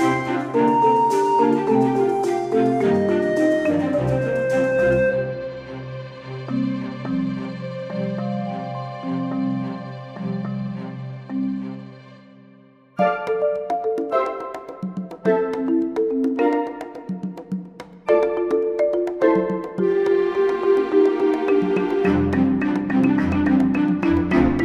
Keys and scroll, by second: 14.3 ctrl+d, 15.8 ctrl+d, 22.0 ctrl+shift+z.